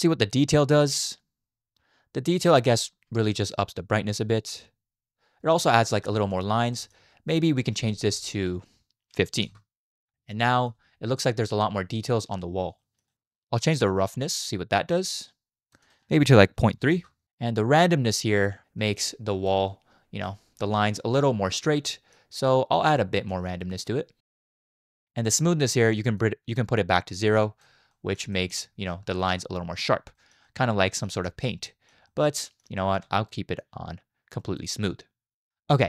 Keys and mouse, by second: 0.6-5.6 drag, 6.2 shift+middle drag, 6.7 shift+middle click, 7.8-9.6 drag, 10.1 middle click, 10.5 shift+middle drag, 11.2 middle click, 12.8 shift+middle drag, 13.1 middle click, 13.9-15.7 drag, 15.8-17.0 drag, 17.8-19.5 drag, 20.2-20.6 middle drag, 21.8 middle click, 22.5 middle click, 23.3-24.9 drag, 26.3-27.7 drag, 27.9 middle drag, 28.3 shift+middle drag, 30.2 shift+middle click, 30.4-31.0 middle drag, 31.3 shift+middle drag, 31.7 middle click, 32.1 shift+middle drag, 32.4 middle click, 32.8 shift+middle drag, 33.7 click, 35.5 middle click.